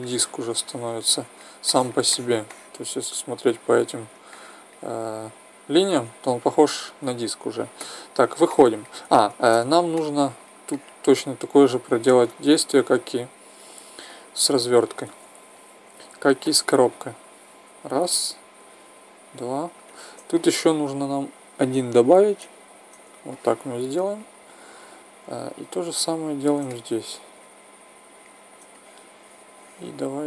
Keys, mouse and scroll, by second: 7.8 Tab, 9.4 Tab, 12.2 ctrl+Tab, 20.8-22.5 middle drag, 23.3 right click, 27.9 middle click, 28.7 right click, 29.2-30.2 middle drag.